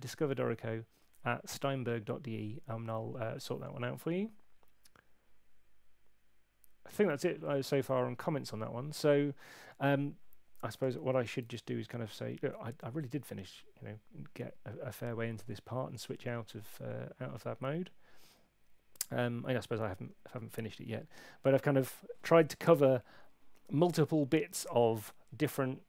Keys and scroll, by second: 11.4 alt+super+1.